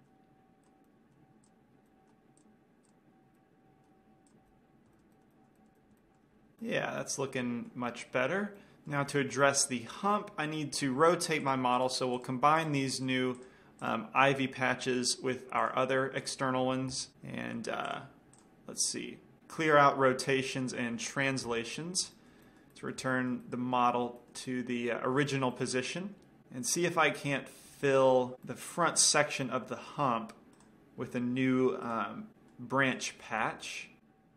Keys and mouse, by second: 1.0-2.7 middle drag, 1.0 right click, 1.8 click, 1.8 right click, 2.5-3.2 drag, 5.7 middle click, 7.0-8.8 middle drag, 11.8-15.9 drag, 11.8 right click, 16.0-17.1 drag, 17.1 ctrl+j, 18.8-19.4 drag, 20.5 alt+r, 20.8 alt+g, 21.8 KP_Decimal, 22.5-24.0 middle drag, 27.5-28.4 middle drag, 28.8-29.9 middle drag, 31.0-31.5 drag, 31.5-32.5 middle drag, 33.8 shift+a.